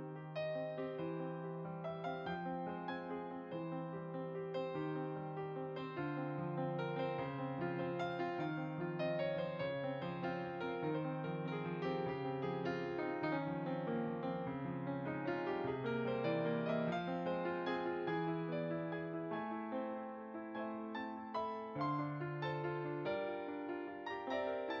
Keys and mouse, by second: 0.8 middle click, 1.4 click, 2.3 middle click, 2.7 f, 2.9 click, 4.9 middle click, 5.3 f, 5.4 click, 7.2 middle click, 7.5 click, 9.0 middle click, 9.6 click, 10.9 click, 11.1 middle click, 11.4 click, 16.2 click, 18.4-19.3 typing, 19.1 click, 21.3 click, 23.2 click.